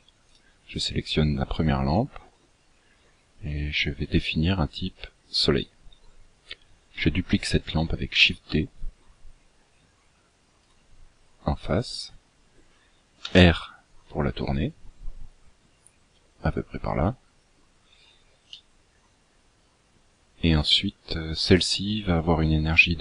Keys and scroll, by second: 8.5 shift+d, 13.5 r.